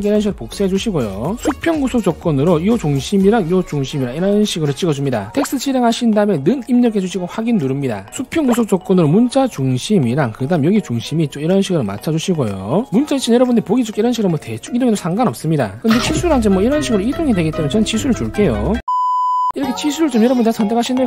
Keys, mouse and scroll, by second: 0.1 ctrl+v, 1.0 click, 2.1 click, 8.0 click, 8.4 ctrl+right click, 12.0 click, 14.3 click, 15.3 click, 16.0 click, 20.8 click.